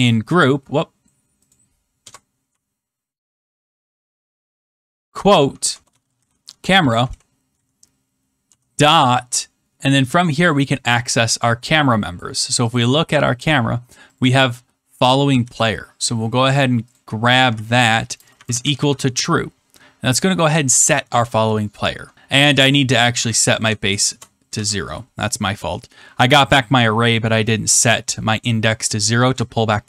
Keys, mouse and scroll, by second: 1.4 click, 2.0-2.4 typing, 3.7 Return, 4.5 Return, 4.5 shift+', 5.5 ctrl+z, 5.6-8.4 typing, 12.7 click, 13.3 middle click, 13.4 middle click, 14.1 click, 14.2 click, 15.3 ctrl+c, 16.9 click, 17.5 ctrl+v, 18.0-19.4 typing, 22.3 click, 23.1-24.0 typing, 24.5 ctrl+s, 28.7 click.